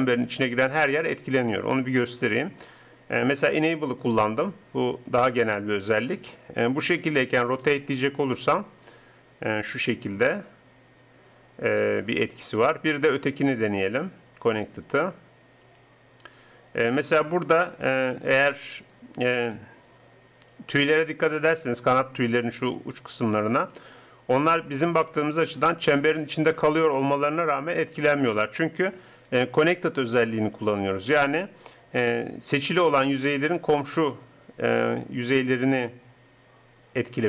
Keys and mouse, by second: 6.8 r, 13.7-15.6 drag, 15.7 r, 23.8 r, 29.1-31.0 drag.